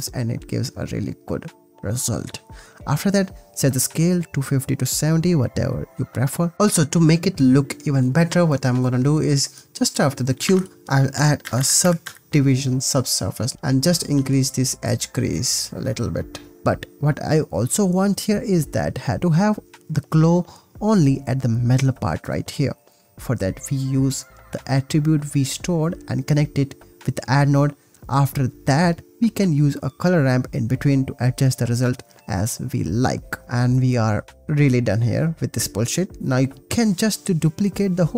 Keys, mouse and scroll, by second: 0.3 space, 0.8 ctrl+s, 2.9-4.4 drag, 5.2 click, 5.6 ctrl+s, 8.4 click, 9.5 click, 10.4 shift+a, 13.3 click, 13.8 ctrl+s, 14.9 ctrl+s, 16.6 x, 16.6 space, 17.2 space, 18.2 space, 19.7 ctrl+s, 19.8 drag, 20.3 click, 20.5 click, 20.6 shift+a, 22.2 click, 22.6 click, 23.2 click, 23.4 shift+a, 24.0 shift+a, 24.5 t, 25.2 click, 28.5 middle click, 28.8 space, 29.6 space, 30.0 click, 30.5-31.0 drag, 31.3 click, 31.7 drag, 32.3 drag, 33.0 ctrl+s, 34.1-34.5 drag, 34.8 click, 35.9 ctrl+s, 37.5 click, 37.8 click.